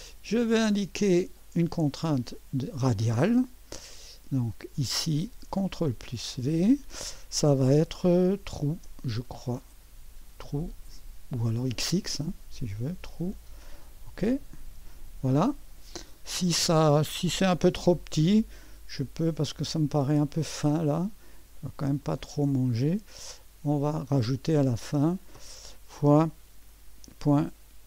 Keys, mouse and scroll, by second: 0.4 click, 2.6-5.5 drag, 5.9 ctrl+v, 8.7 t, 10.1-10.9 typing, 11.9-13.0 drag, 14.2 click, 16.1 scroll up 1, 22.0 click, 23.8 click, 24.8 click, 26.0 KP_Multiply, 27.2 KP_Decimal.